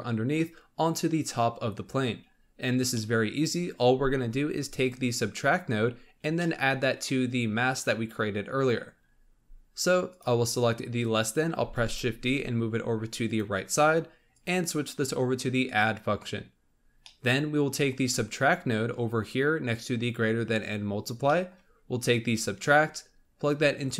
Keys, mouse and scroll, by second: 2.2-2.9 scroll down 1, 2.9 middle click, 3.4-4.7 scroll up 3, 4.7 click, 6.3-9.0 middle drag, 9.0-10.0 scroll up 4, 10.0 click, 11.6 shift+d, 14.3-16.6 drag, 16.6 scroll down 5, 17.2 middle click, 18.0-19.2 scroll up 1, 19.2-20.6 scroll up 1, 20.6-21.0 scroll up 1, 21.1 scroll down 2, 21.2-22.6 middle drag, 22.6-23.9 drag.